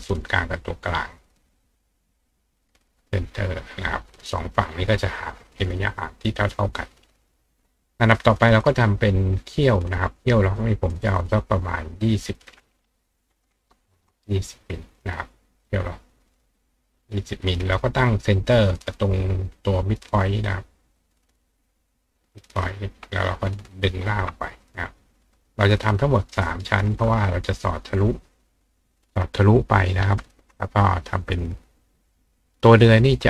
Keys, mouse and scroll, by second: 0.6 click, 1.7 click, 2.4 click, 2.8 click, 3.8 click, 5.9 click, 6.7 click, 8.2 click, 8.8 click, 10.9 click, 12.1 click, 15.7 click, 16.3 click, 20.5-22.3 drag, 23.4 ctrl+click, 24.5 click, 25.2 click, 26.0 ctrl+click, 26.3 ctrl+right click, 32.5 click.